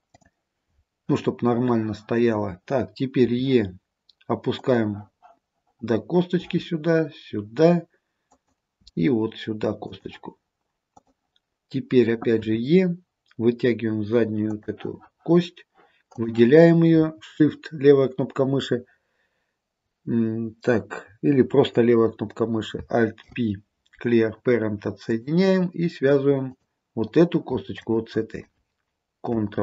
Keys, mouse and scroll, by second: 0.2 click, 6.5 e, 8.9 e, 11.0 click, 12.5 e, 16.2 click, 23.3 alt+p, 26.6 click, 27.9 shift+click.